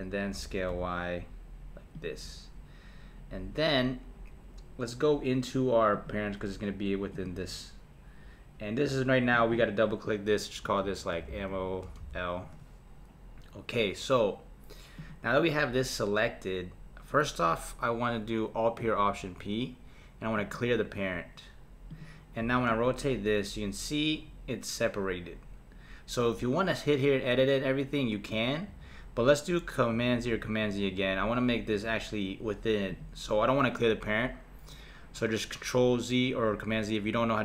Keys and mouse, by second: 0.3 s, 5.9 click, 7.1 click, 9.3-11.3 drag, 11.3 m, 15.0 click, 19.0 alt+p, 21.9 click, 22.4 r, 30.1 z, 30.7 z, 32.9 click.